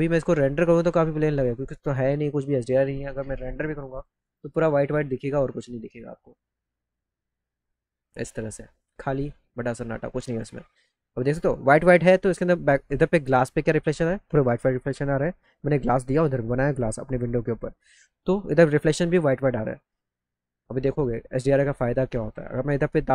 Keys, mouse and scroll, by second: 3.9 click, 4.2 click, 10.2 click, 11.3 middle click, 11.3 middle click, 22.2 right click.